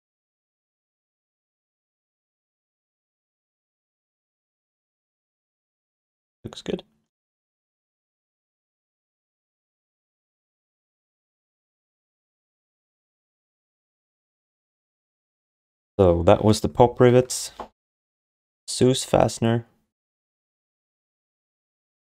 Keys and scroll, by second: 2.7 alt+shift+d, 3.0 ctrl+s, 3.6 alt+q, 8.5 ctrl+s, 10.6 6, 13.8 ctrl+s.